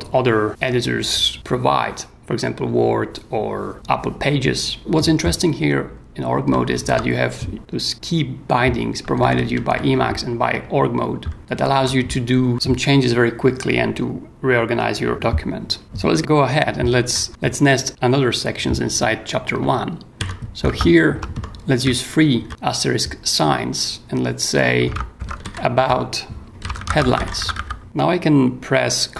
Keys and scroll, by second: 6.4 k, 9.1 k, 11.4 Tab, 11.5 j, 15.8 j, 17.0 o, 19.5 shift+8, 20.6 shift+space, 21.3 shift+BackSpace, 22.4 shift+8, 24.8-28.0 typing.